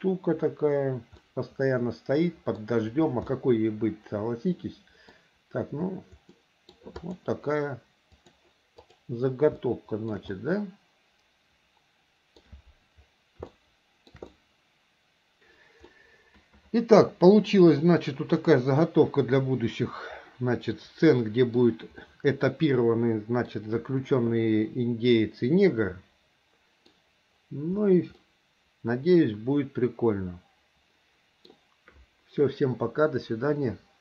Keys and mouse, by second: 0.0 click, 1.4-2.8 middle drag, 3.5-5.3 middle drag, 6.5 middle click, 7.1 click, 8.3 click, 9.0 click, 9.8 shift+middle click, 10.5-12.6 middle drag, 13.7 shift+middle click, 14.5 middle click, 16.0-17.6 middle drag, 18.5-21.5 middle drag, 21.6 middle click, 22.2-23.7 middle drag, 25.3-27.0 middle drag, 28.3 middle click, 29.0-31.6 drag, 29.0-31.6 right drag.